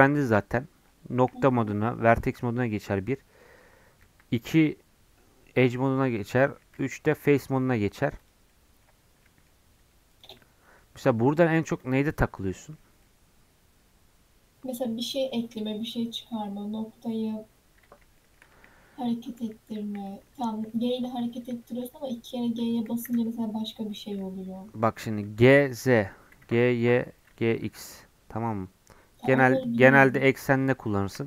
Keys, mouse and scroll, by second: 1.1 1, 1.9-4.0 middle drag, 4.0 2, 7.6 middle click, 8.1 click, 8.4 middle click, 9.0 2, 9.1 scroll up 1, 9.3 middle click, 9.8 3, 10.1 click, 10.3 middle click, 10.8 scroll down 3, 10.9 middle click, 11.8 scroll up 1, 12.0-15.3 middle drag, 15.3 scroll down 2, 15.5-18.5 middle drag, 18.5 1, 20.0 click, 20.3-20.6 scroll up 2, 20.6-22.5 middle drag, 22.5 g, 24.6-24.9 scroll up 1, 24.9 g, 26.2 g, 29.4-31.2 middle drag.